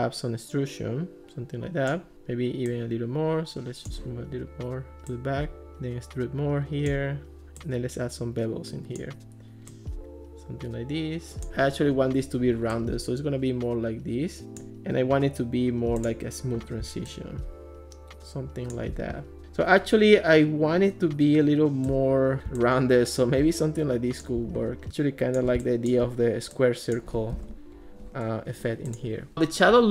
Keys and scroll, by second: 27.4 alt+r.